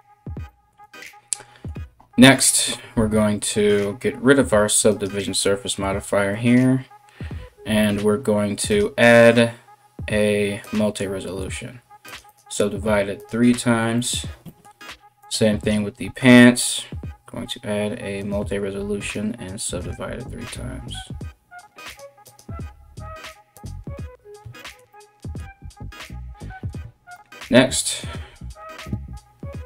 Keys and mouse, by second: 4.5-21.6 drag, 14.8 right click, 15.2-21.6 right drag, 21.8 click, 23.2-29.6 drag, 25.6 KP_1, 27.6 right click.